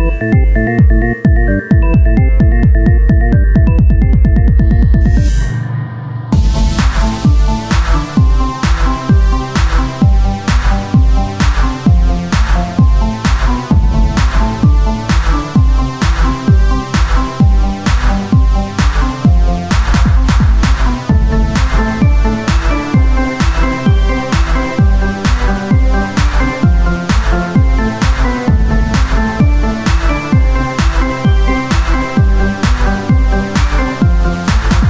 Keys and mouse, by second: 0.1 z, 0.3-2.2 drag, 0.9 Tab, 2.2 ctrl+b, 3.5 e, 6.1 Tab, 16.8 KP_1, 17.4 z, 19.0-20.3 drag, 19.1 shift+a, 20.3 s, 23.5 s.